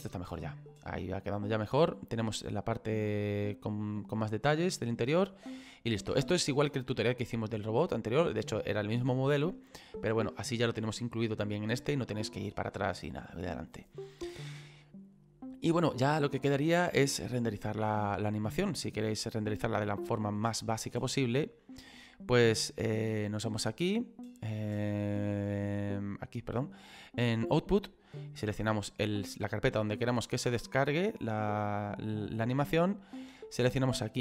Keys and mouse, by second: 23.5 click, 25.6 click, 30.5 click, 31.7 click, 33.5 click.